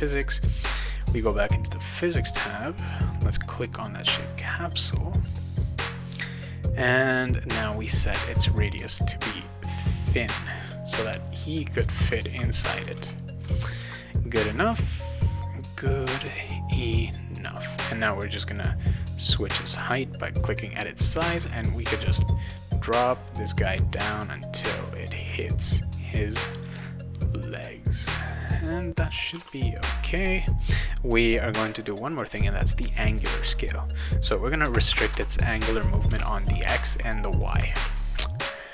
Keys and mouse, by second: 0.9 click, 4.7 click, 5.3 click, 8.6-11.0 drag, 11.6-14.7 typing, 11.7-15.2 right drag, 18.1 click, 20.4 click, 21.6-25.7 drag, 26.0 right click, 26.5 click, 28.4 click, 29.0 click, 29.3 ctrl+s, 30.5 click, 32.4 click, 32.6 click, 34.9 Tab, 37.4 click, 37.7 ctrl+s.